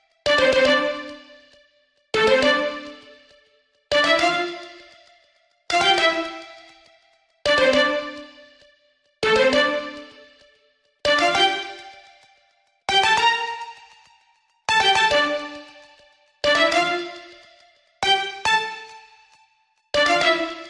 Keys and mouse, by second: 2.8 KP_2, 10.8-13.5 middle drag.